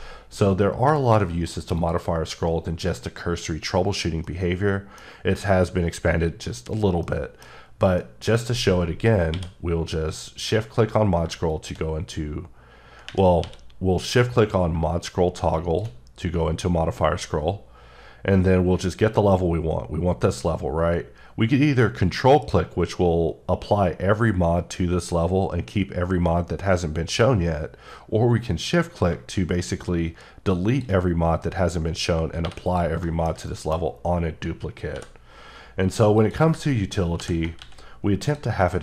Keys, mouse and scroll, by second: 1.8 click, 4.3 middle click, 7.2 middle click, 8.0 middle click, 9.3 q, 11.5 click, 12.3-13.0 scroll up 3, 13.4 q, 15.6 shift+click, 16.3-17.9 scroll up 5, 18.3-19.2 scroll down 2, 19.5-20.5 scroll up 1, 29.1-29.8 shift+scroll up 1, 30.7 shift+click, 32.4 3, 32.7 click, 33.0 shift+middle click, 33.8 scroll up 2, 34.9 i, 36.2 click, 37.2 ctrl+i, 37.6 x, 38.3 click, 38.7 middle click.